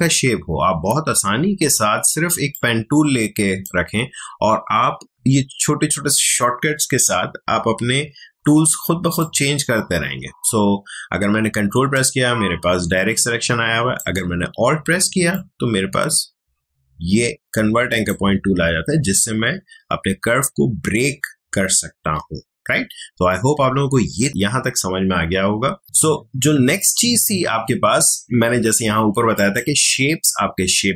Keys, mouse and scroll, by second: 2.5-5.1 ctrl+drag, 8.3 ctrl+click, 9.2-15.3 ctrl+drag, 15.3-24.5 alt+drag, 25.8-29.3 drag.